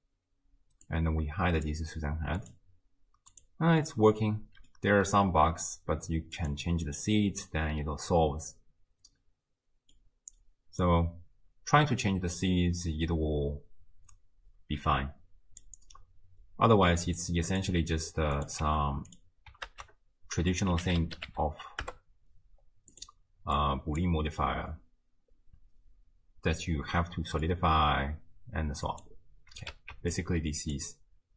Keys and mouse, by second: 1.0 drag, 2.4 click, 3.4 click, 4.0-4.8 middle drag, 6.4 click, 7.9-10.0 middle drag, 10.9-15.6 drag, 17.2-17.6 drag, 18.4 click, 18.7 g, 19.7 ctrl+a, 23.6-24.0 drag, 26.9-27.5 middle drag, 29.0 click, 29.9 ctrl+x, 30.2-30.8 drag.